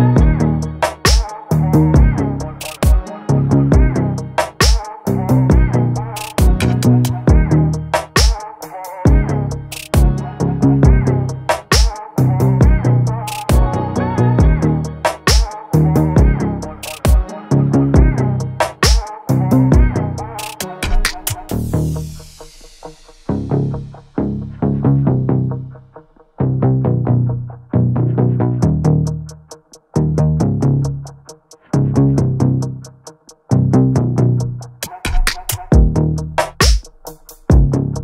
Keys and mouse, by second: 0.7 click, 0.9 click, 1.1 click, 1.3 click, 1.5 click, 4.1 click, 5.6-6.5 middle drag, 13.0 click, 14.9-16.2 drag, 17.6-19.0 drag, 21.2 n, 22.2 click, 25.6-26.6 shift+middle drag, 28.8 middle click, 30.3 shift+a, 35.7 middle click.